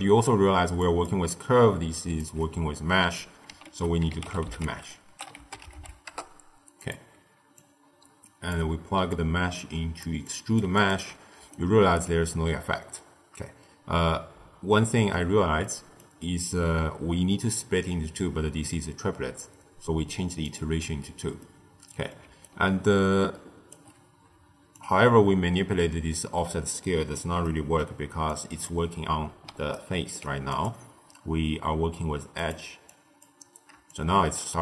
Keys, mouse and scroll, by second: 0.4 d, 0.7 click, 1.0-1.5 d, 1.9 click, 2.1 d, 3.6 ctrl+a, 7.5 drag, 9.0 drag, 10.2 click, 10.7 alt+shift+click, 11.3 d, 11.4-11.9 right drag, 11.9 d, 11.9 d, 12.6-20.4 middle drag, 20.4 click, 21.3-22.1 middle drag, 22.1 d, 22.4-23.7 right drag, 23.7 d, 23.7 d, 24.7-27.4 drag, 27.4 middle click, 28.2 click, 29.4 d, 29.6 right click, 30.0 d, 30.4-32.9 drag, 33.8-34.6 shift+drag.